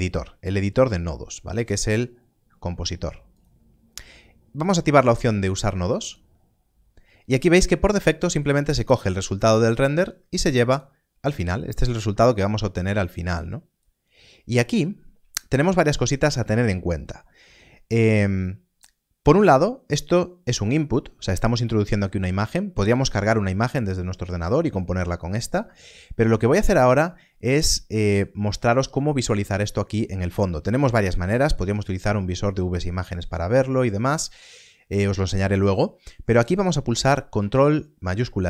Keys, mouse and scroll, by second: 1.5 ctrl+space, 5.9 click, 8.5 click, 12.7 click, 18.4 click, 30.8 click, 33.1 middle click, 37.3 middle click.